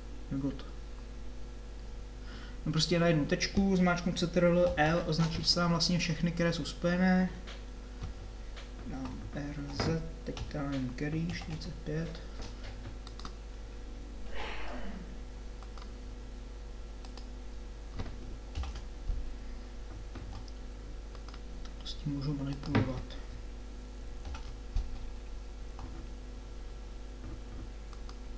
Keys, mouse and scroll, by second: 4.7 ctrl+l, 8.9 r, 14.3 g, 18.5 ctrl+l, 20.3 g, 24.2 ctrl+l, 25.9 r.